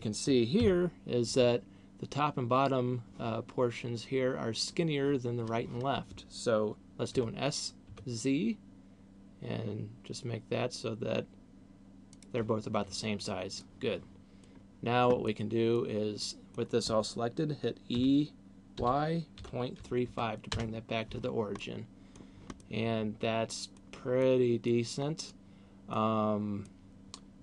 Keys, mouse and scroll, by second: 0.7 KP_1, 7.2 s, 12.2 click, 13.4 middle click, 15.2 middle click, 16.2 middle click, 17.9 e, 21.4 middle click, 22.4 middle click, 24.2 middle click, 25.4 middle click, 26.7 middle click.